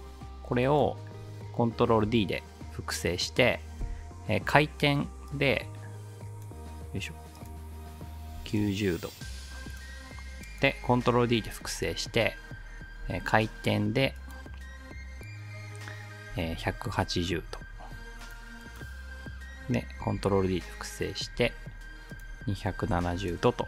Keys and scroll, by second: 2.1 ctrl+d, 3.8 r, 8.1-8.8 typing, 11.4 ctrl+d, 13.0 r, 16.1-17.1 typing, 20.0 ctrl+d, 21.4 r, 22.5-23.6 typing.